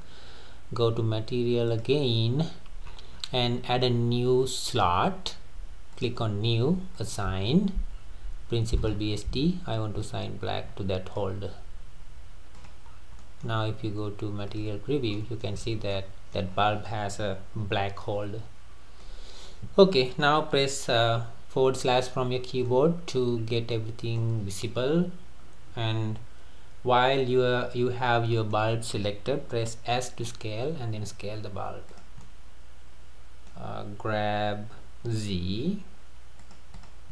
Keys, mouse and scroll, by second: 1.7 click, 2.4-3.6 scroll up 13, 4.7-8.0 drag, 8.0-8.8 scroll down 5, 8.8 click, 12.5 click, 12.9 scroll down 3, 13.2-14.5 middle drag, 14.5 click, 15.1-15.6 middle drag, 15.6-15.9 scroll up 3, 15.9 middle click, 16.5-16.9 scroll down 3, 16.9 middle click, 17.6 Tab, 18.0-21.2 middle drag, 21.9 /, 22.4 scroll down 1, 22.7-23.4 middle drag, 23.4-23.7 scroll up 3, 23.7-26.7 middle drag, 28.1-29.9 middle drag, 29.9 s, 32.3-34.7 middle drag, 34.7 g, 36.8 click.